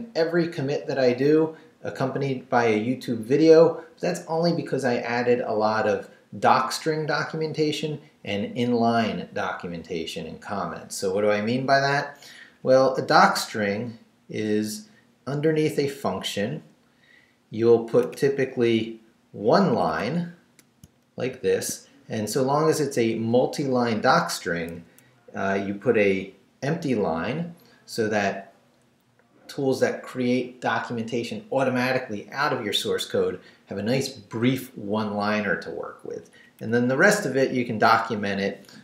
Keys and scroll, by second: 12.4 Down, 18.1 Up, 19.7 Up, 20.8 shift+Up, 21.3 shift+v, 25.9 Down, 36.1 Down.